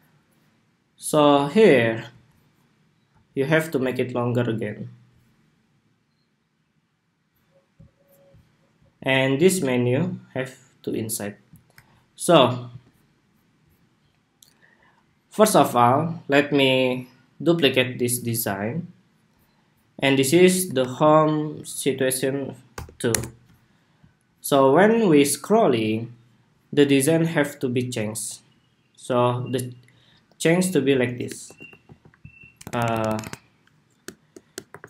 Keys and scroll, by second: 12.4 super+s, 18.0 super+d, 20.5 super+r, 30.6 super+a.